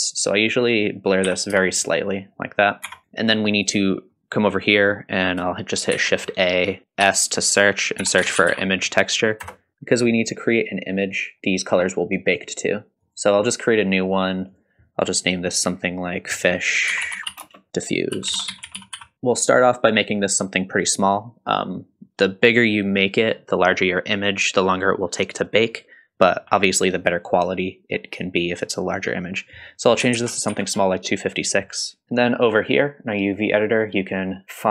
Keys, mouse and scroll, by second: 0.4-2.0 drag, 2.9 Tab, 3.0 Tab, 3.0 click, 3.0 middle click, 3.0 scroll down 1, 5.9 shift+a, 9.7 middle click, 9.7-10.7 scroll up 3, 13.0-32.0 drag, 18.5 f, 32.0-33.8 scroll down 4, 33.8-34.7 drag.